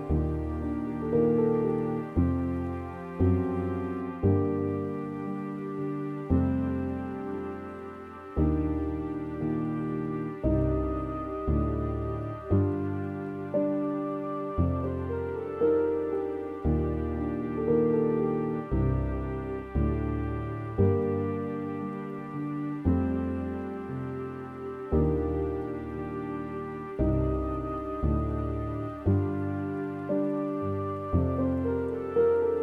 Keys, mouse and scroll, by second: 1.7 scroll down 2, 1.9-3.0 middle drag, 3.0-3.3 scroll down 2, 3.8 e, 5.5-5.8 scroll down 3, 5.8-18.4 middle drag, 18.4-20.0 scroll up 2, 20.0-21.2 scroll up 4.